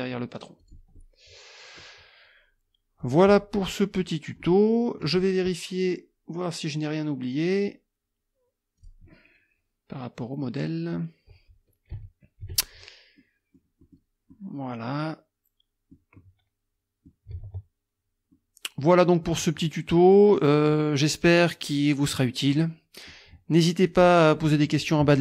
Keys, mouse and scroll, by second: 0.6 click, 0.9-2.0 middle drag, 0.9-2.0 scroll down 2, 3.0 click, 3.9 middle click, 4.4 middle click, 5.7 click, 8.8 click, 11.9 KP_Subtract, 13.2 click, 13.8 click, 14.3-16.1 drag, 16.2 click, 17.5 alt+Tab, 18.3 click, 21.6 click, 22.5 click, 23.9 click.